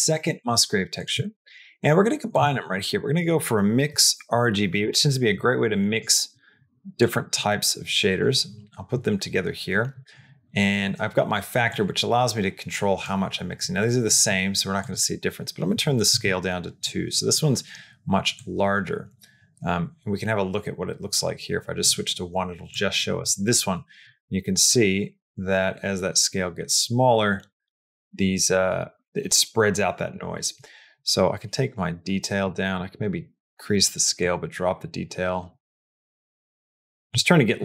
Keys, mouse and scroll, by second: 0.1 shift+d, 1.2 shift+middle click, 2.4 shift+a, 6.8-8.0 drag, 11.7-12.9 drag, 14.8-16.7 drag, 18.4-21.7 drag, 22.6 click, 23.9-27.9 drag, 31.0-32.3 drag, 32.7 click, 34.0-35.5 drag, 35.6-36.9 drag.